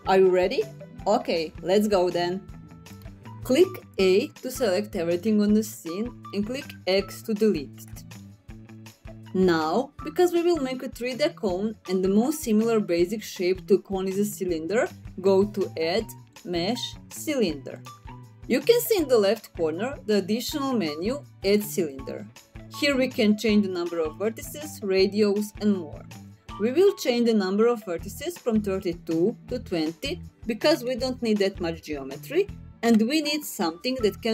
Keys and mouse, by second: 0.0 middle click, 0.1 click, 0.4 n, 0.5 click, 0.6 click, 0.8 ctrl+alt+KP_0, 1.0 click, 2.2 click, 2.5 click, 3.5 a, 6.1 x, 14.7-16.2 drag, 29.1-33.5 drag.